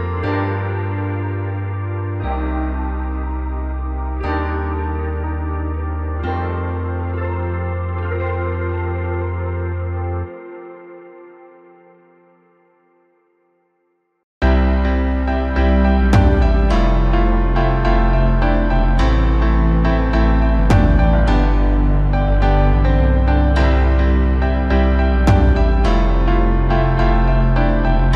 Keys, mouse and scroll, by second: 0.3 Tab, 0.9-1.6 middle drag, 1.6 click, 2.6 l, 3.3 click, 3.9 l, 4.5-5.3 scroll up 1, 5.3 g, 7.4 Tab, 7.8-8.3 scroll down 7, 8.3-10.1 middle drag, 10.1-10.9 scroll up 5, 10.9 middle click, 11.3 KP_1, 12.3 g, 15.1-15.5 scroll down 8, 15.8 KP_7, 16.5-16.8 scroll down 1, 16.8 Tab, 17.2-18.6 scroll up 2, 18.6 a, 19.1-19.5 scroll up 1, 19.5-20.0 scroll down 3, 20.0 3, 20.4-21.9 scroll down 2, 21.9-23.1 scroll down 1, 23.1-25.3 drag.